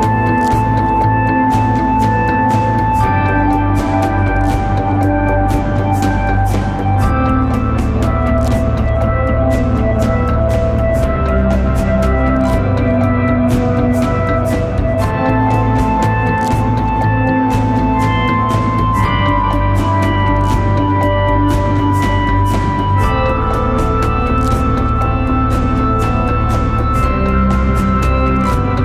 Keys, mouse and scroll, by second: 15.8 ctrl+t, 19.4 alt+shift+click, 25.0 Return.